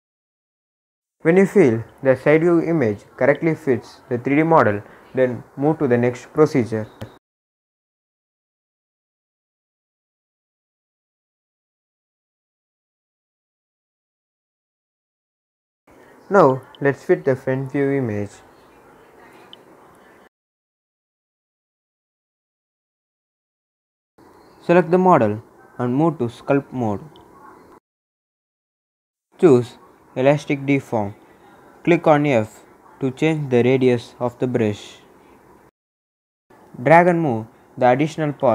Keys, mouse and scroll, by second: 8.6 s, 10.3 click, 10.4-13.9 drag, 14.5 scroll down 1, 15.3-18.3 drag, 18.3-19.0 scroll up 1, 19.0 s, 21.1 click, 23.3 s, 24.1 click, 27.4 click, 30.2 click, 31.7 f, 33.4 click, 34.6 f, 35.0-38.5 drag.